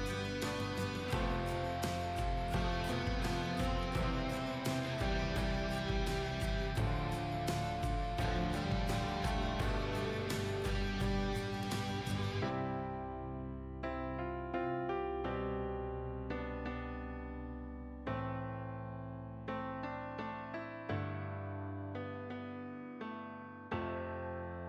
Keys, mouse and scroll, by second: 0.6 scroll down 1, 1.3 click, 3.0 alt+scroll down 1, 3.7 alt+scroll up 1, 4.7-21.0 drag, 22.9 click, 23.3-24.6 drag.